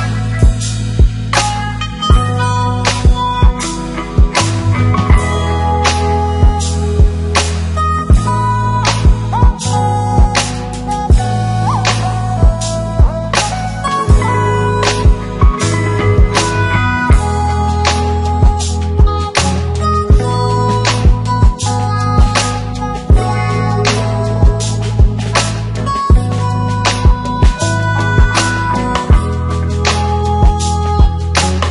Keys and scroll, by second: 16.1 shift+F4.